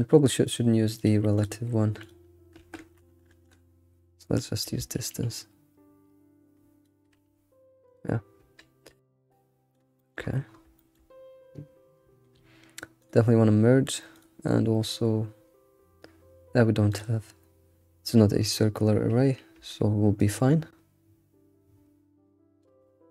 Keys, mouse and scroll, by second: 1.4-7.3 drag, 7.3 s, 9.1 shift+click, 10.0 shift+middle drag, 10.2-11.1 scroll up 9, 10.8 shift+middle click, 13.0 click, 14.2 click, 14.6 scroll down 1, 16.9-19.7 drag, 20.2-23.1 shift+drag.